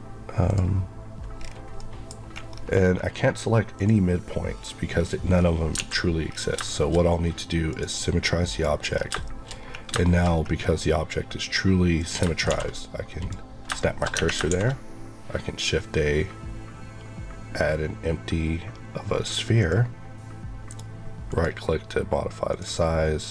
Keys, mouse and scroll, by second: 0.4 click, 1.3 scroll down 1, 1.7 middle click, 2.2 scroll up 1, 3.7 click, 4.9-5.2 scroll down 1, 5.7 alt+x, 6.2 scroll down 1, 6.6 shift+middle click, 7.6 click, 8.9-9.2 scroll up 2, 9.2 shift+middle click, 9.9 shift+middle click, 10.2 scroll up 1, 11.9 click, 12.1 shift+click, 12.4 shift+s, 13.1 click, 13.7 shift+middle click, 14.1 Tab, 14.4 shift+a, 19.5 click, 20.6 right click, 21.2 click, 23.1 click.